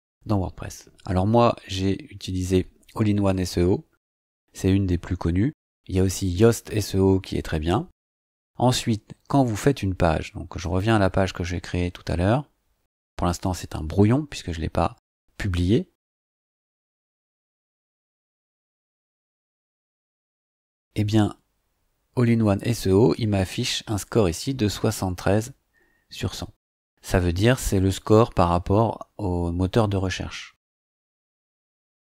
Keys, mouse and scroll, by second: 10.6 click, 16.2 click.